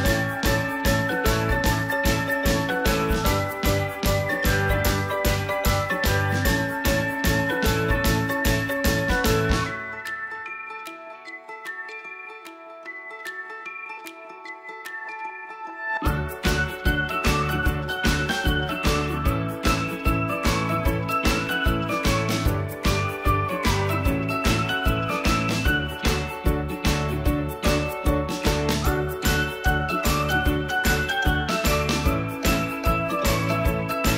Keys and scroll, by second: 15.3 ctrl+a, 16.8 ctrl+a.